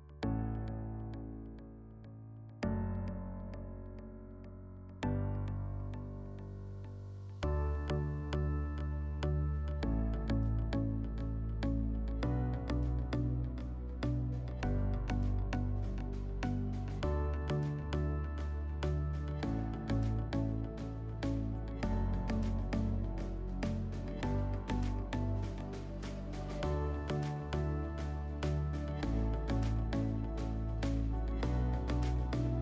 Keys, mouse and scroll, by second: 2.6-4.2 drag, 12.7-14.2 drag, 16.2-17.7 drag, 24.3 /, 28.9 click.